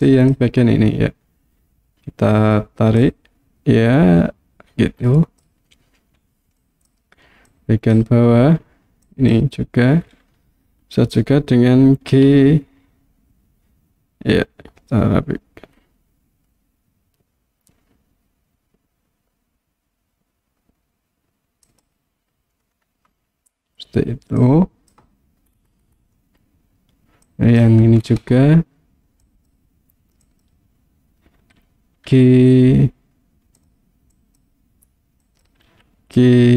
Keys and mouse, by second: 0.1 click, 3.1-5.4 drag, 6.8 click, 7.5 click, 9.1 click, 12.1 g, 21.7 click, 24.4 click, 27.3 click, 29.4 click, 30.3 click, 32.1 g, 33.6 click, 34.3 click, 35.4 click, 35.7 g.